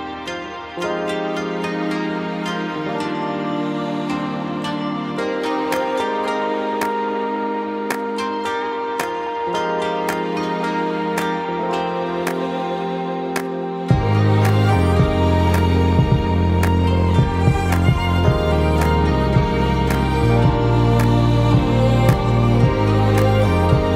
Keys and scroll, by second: 16.8 |, 21.4 ctrl+Return.